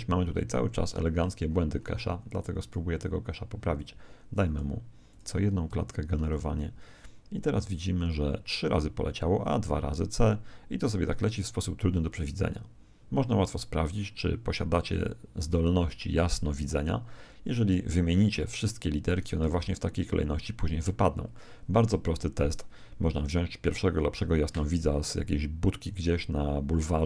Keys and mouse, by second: 0.5 Escape, 1.5-2.6 middle drag, 2.6-6.8 drag, 6.1 alt+a, 17.1 Escape, 19.5 alt+a, 25.7 Escape.